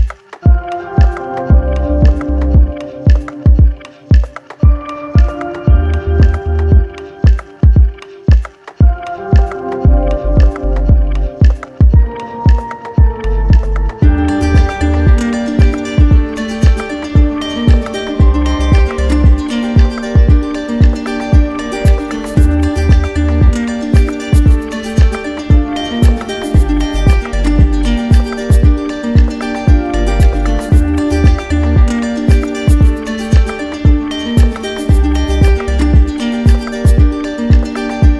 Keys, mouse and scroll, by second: 0.2 right click, 1.8 right click, 3.1 alt+right click, 4.8 right click, 5.7 right click, 6.6 alt+right click, 9.6-11.8 middle drag, 13.3 click, 13.8 shift+click, 14.9 right click, 15.9 right click, 16.3-17.4 right drag, 18.3-19.4 drag, 23.3 middle click, 25.2 middle click, 25.4 middle click, 25.4 shift+click, 26.3 shift+click, 28.5 right click, 30.5 middle click, 31.1 middle click, 31.5 middle click, 31.8 click, 32.3 shift+click, 33.4 right click, 34.8 alt+right click, 37.3 right click.